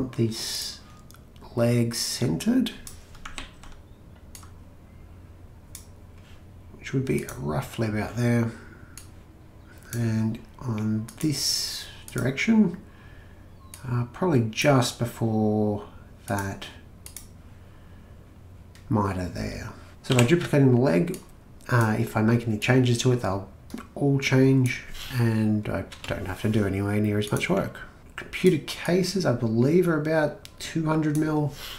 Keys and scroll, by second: 3.4 ctrl+z, 20.1 m, 25.9 Return.